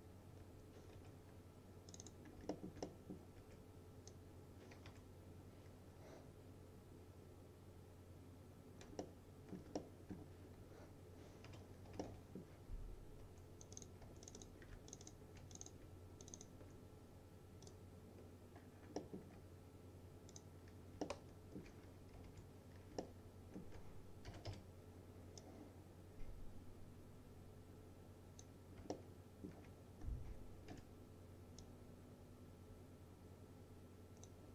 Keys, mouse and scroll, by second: 0.3 scroll up 1, 0.5 2, 1.0 F3, 2.0 click, 2.3 scroll down 1, 2.6 alt+middle click, 3.4 w, 4.2-9.7 click, 4.9 F3, 9.1-10.5 alt+middle drag, 10.5-11.5 scroll up 1, 11.5 F3, 12.1 middle click, 12.4-12.7 F4, 13.3 2, 13.7 click, 14.1 2, 14.3 click, 15.0 ctrl+click, 16.3 ctrl+click, 18.6 scroll down 1, 19.1 alt+middle click, 20.4 click, 21.1-21.7 alt+middle click, 22.0-22.8 typing, 23.1-23.7 alt+middle drag, 24.1-25.0 typing, 25.5-28.6 drag, 29.0-29.6 alt+middle click, 30.1-30.8 scroll up 1, 30.8 e, 31.7-34.5 drag.